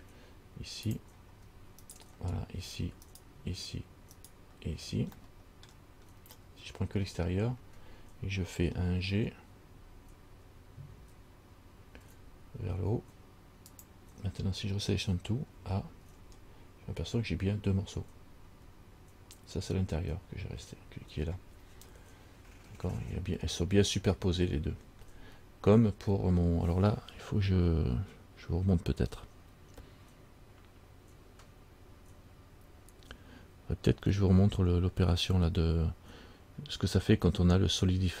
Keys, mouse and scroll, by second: 1.1 click, 2.0 alt+right click, 3.3 alt+shift+right click, 4.4 alt+right click, 5.4 middle click, 6.5-7.1 scroll up 2, 7.1 scroll down 1, 8.9 scroll down 2, 12.2 g, 15.8 a, 16.3 a, 22.6-23.5 scroll up 1.